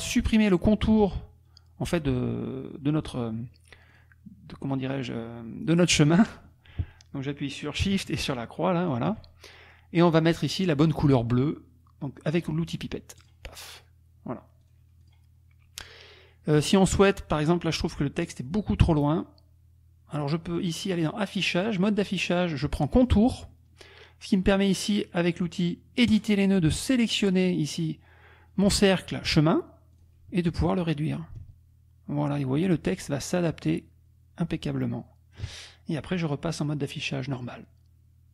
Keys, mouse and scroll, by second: 3.9 click, 6.1 click, 8.8 shift+click, 10.0 click, 12.3 click, 13.2 click, 14.7 click, 15.1 click, 20.6 click, 23.1 click, 26.1 click, 27.7 click, 29.9 click, 31.4-35.5 ctrl+shift+drag, 36.1 click.